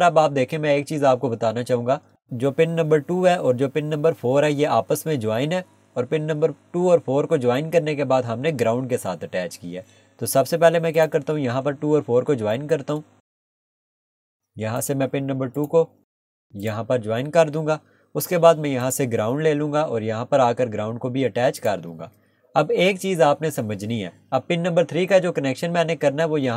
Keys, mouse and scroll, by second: 11.0 click, 11.9 k, 12.0 scroll down 1, 12.5 middle click, 13.5 click, 13.7 scroll up 1, 14.8 click, 17.6 Escape, 18.8 click, 20.7 scroll up 1, 21.6 click, 22.2 Escape, 22.6 scroll down 1.